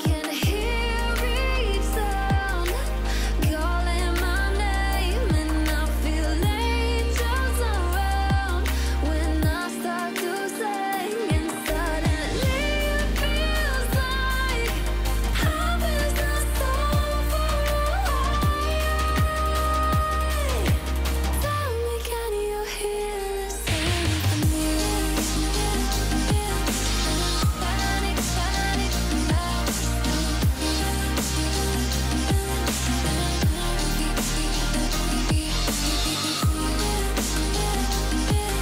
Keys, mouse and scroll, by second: 0.5 Return, 1.6-9.1 drag, 9.9 click, 13.5-17.6 drag, 18.2 alt+scroll up 1, 18.5 click, 19.3-19.9 alt+scroll up 1, 19.9-22.1 alt+click, 22.6 alt+scroll down 1, 23.0 alt+scroll up 1, 23.8 click, 24.7-25.1 alt+scroll down 1, 25.1 click, 28.3-28.8 click, 29.2 ctrl+c, 29.7 alt+scroll up 1, 30.0 click, 30.4 ctrl+v, 30.9 click, 33.4-33.8 alt+shift+click, 34.7-35.1 alt+scroll up 1, 36.1 click.